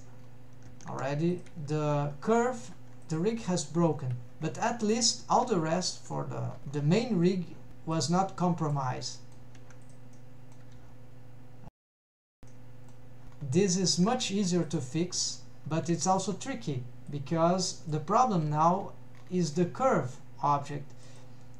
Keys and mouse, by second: 1.0 ctrl+Tab, 1.4 click, 1.9 g, 2.9 Escape, 3.2 click, 3.5 g, 4.3 Escape, 8.1-8.8 drag, 9.2 shift+middle click, 9.9 click, 10.3-10.6 middle drag, 11.0 g, 12.5 Escape, 12.6-13.1 middle drag, 14.2 ctrl+Tab, 14.8 click, 15.7 shift+click, 16.1 middle click, 17.1 click, 21.2 click.